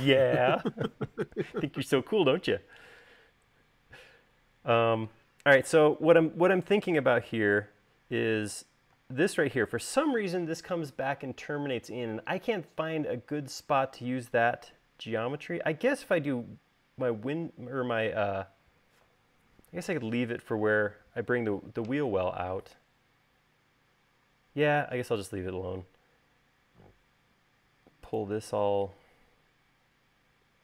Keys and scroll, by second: 9.1 space.